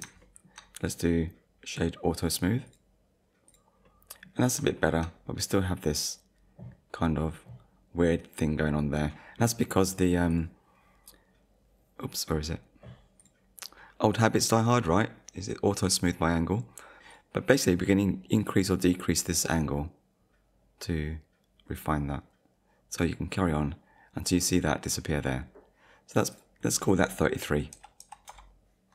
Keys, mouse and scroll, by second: 0.2 shift+middle click, 0.8 right click, 2.7 click, 3.5 click, 3.8 middle click, 4.5 scroll down 1, 4.8 shift+middle click, 7.0 middle click, 7.8-8.2 scroll up 1, 10.3 click, 13.2 click, 14.1 click, 16.6 shift+middle click, 17.1 click, 18.3 click, 26.3 click, 27.7 3, 28.3 Return.